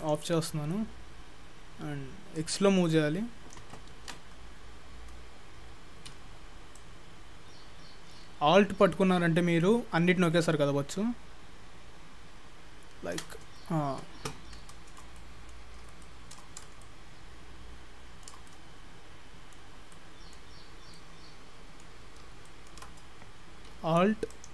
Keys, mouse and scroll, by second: 0.1 click, 2.4 click, 4.0 ctrl+z, 6.8 alt+click, 14.7 shift+middle click, 15.2 middle click, 15.7 scroll up 5, 16.0 shift+middle click, 16.5-16.8 scroll up 3, 16.8 shift+middle click, 18.5 middle click, 19.8 scroll down 4, 20.0 middle click, 20.6-21.3 scroll up 6, 21.0 middle click, 22.1-22.5 scroll up 2, 22.5 shift+middle click, 24.4 alt+click.